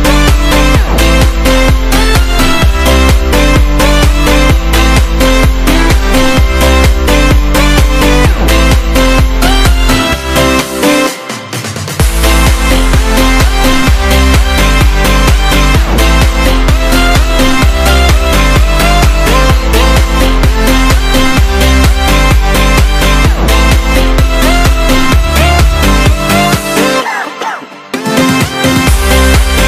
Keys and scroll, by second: 4.9 super+-, 5.1 super+-, 5.3 super+-, 6.1 super+=.